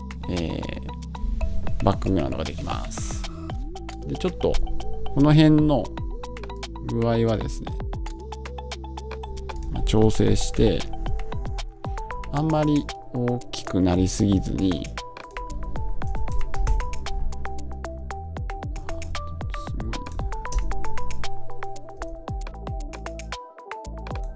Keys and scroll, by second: 10.4 Return, 16.5 Return.